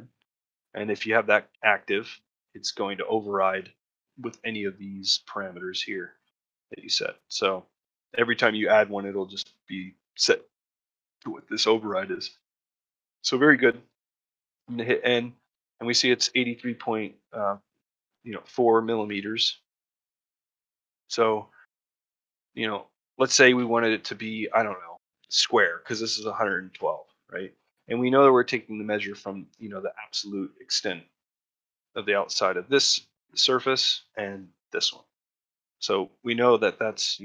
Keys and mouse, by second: 7.0 middle click, 7.4 middle click, 7.9 shift+middle click, 12.3 middle click, 12.7 shift+middle click, 14.8 middle click, 15.1 shift+middle click, 15.4 middle click, 15.8 shift+middle click, 16.7 middle click, 19.0 middle click, 19.3 shift+middle click, 20.6 middle click, 21.0 shift+middle click, 21.5 alt+middle click, 22.4 alt+middle click, 23.2 ctrl+middle click, 23.5 shift+middle click, 27.7 ctrl+middle click, 28.0 shift+middle click, 33.8 shift+middle click, 35.2 shift+middle click, 35.5 ctrl+middle click, 35.8 shift+middle click.